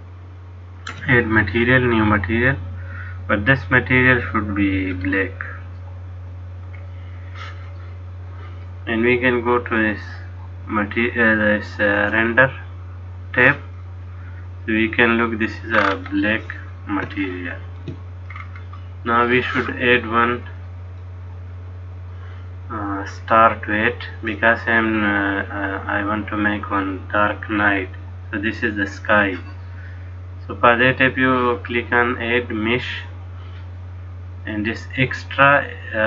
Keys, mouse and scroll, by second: 3.8 click, 10.0 click, 13.0 click, 14.0 middle click, 15.9-16.9 scroll up 7, 17.3 shift+middle click, 18.4-18.9 scroll down 4, 20.6 click.